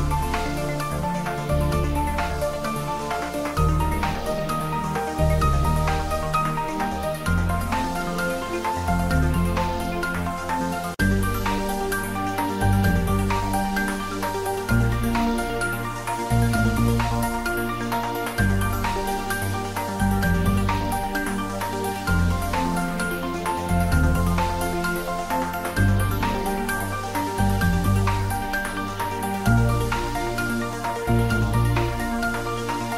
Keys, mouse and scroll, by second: 1.0 click, 1.3 s, 2.3 click, 5.0 click, 6.4 click, 6.6 ctrl+s, 7.9 click, 10.8-11.2 shift+middle drag, 12.3 click, 15.4 click, 17.0-18.0 scroll down 1, 18.0 click, 19.5 s, 20.4 click, 20.8 ctrl+s, 20.9-21.8 middle drag, 23.6 click, 24.2 shift+click, 25.0 ctrl+j, 27.3 click, 28.6 shift+middle click, 28.9 click, 29.5-30.1 shift+middle click, 30.1-30.5 ctrl+middle click, 30.9 3, 31.3 ctrl+s, 31.7 click, 32.4 Tab.